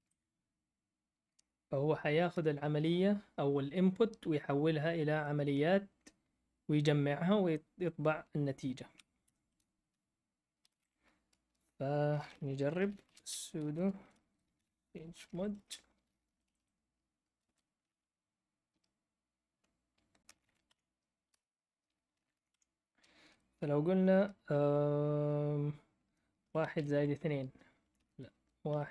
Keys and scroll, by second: 9.2 Escape, 10.3-11.3 typing, 12.5-16.2 typing, 17.4 typing, 20.0-23.0 typing, 26.1-28.9 typing.